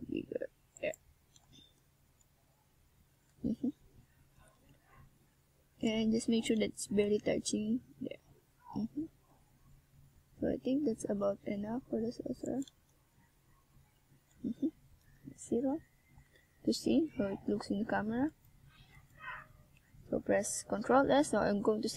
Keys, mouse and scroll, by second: 0.0 click, 1.4 z, 2.0 Tab, 4.0 click, 5.5 middle click, 7.4 click, 8.0 click, 9.7 middle click, 12.3 Tab, 13.2 a, 14.5 ctrl+r.